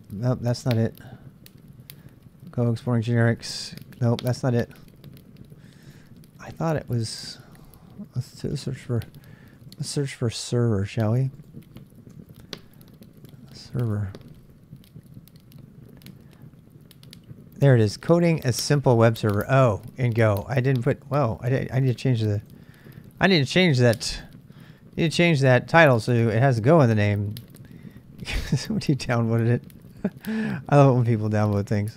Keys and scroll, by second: 8.4-9.4 typing, 10.5 BackSpace, 12.1-14.2 typing.